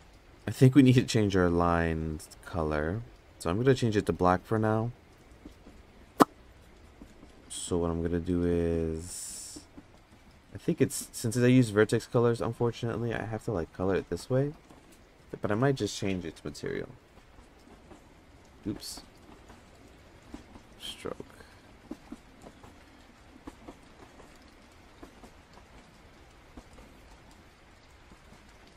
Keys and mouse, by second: 6.6 click, 7.7 click, 11.2 click, 12.6 click, 16.6 f, 17.5 click, 18.6 ctrl+z, 19.8-20.9 drag, 21.2 click, 23.5-24.1 drag, 24.6-28.2 drag, 28.4 click.